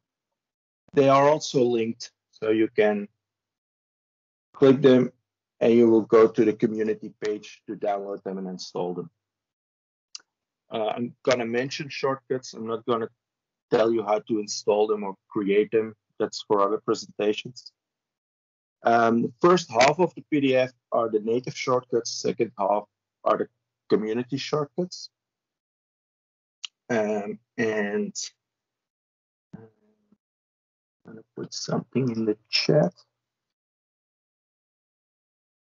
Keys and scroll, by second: 34.6 ctrl+c.